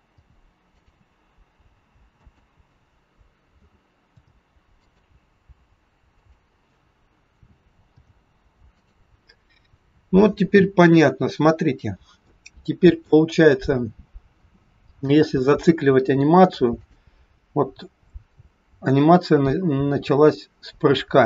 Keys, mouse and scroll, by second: 0.2 i, 2.0 click, 3.6 a, 4.0 i, 6.2 click, 7.3 a, 7.8 i, 10.4-10.9 scroll down 2, 12.1 scroll down 1, 12.2 shift+middle click, 13.4-13.9 scroll down 1, 16.8 click.